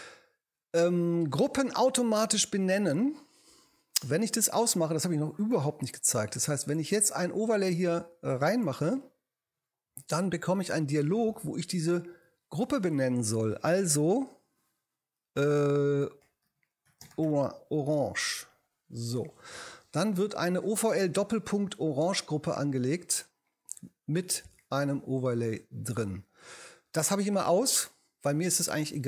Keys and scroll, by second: 16.0-17.7 typing.